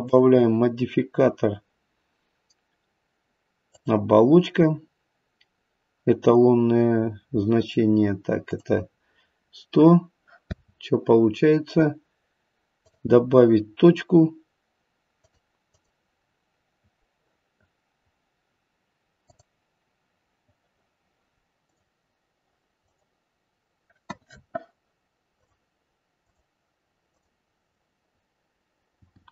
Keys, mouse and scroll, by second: 0.0 click, 8.4 click, 10.4 space, 12.7 click, 15.1 click, 15.6 click, 19.2 click, 21.6 click, 22.8 click, 25.3 click, 26.2 click, 27.0 click, 29.0 g.